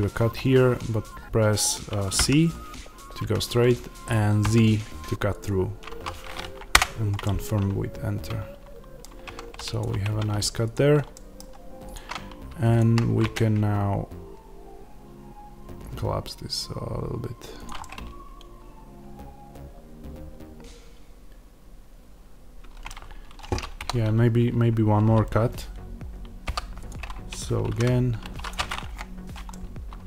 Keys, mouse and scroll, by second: 6.7 Return, 6.7-9.7 middle drag, 9.1 Tab, 9.7 click, 9.9 Tab, 10.6 click, 11.0 middle click, 11.8 click, 13.0 s, 17.5 click, 17.7-28.9 middle drag, 23.7 KP_1, 26.4 k, 28.9 Return, 29.4 middle click.